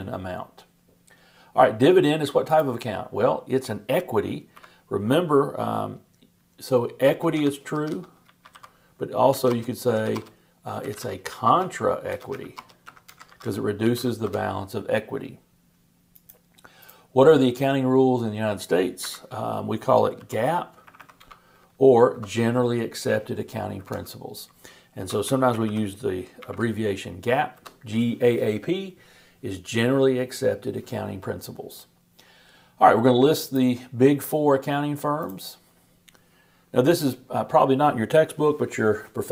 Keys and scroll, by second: 25.2 shift+g, 26.4 shift+p.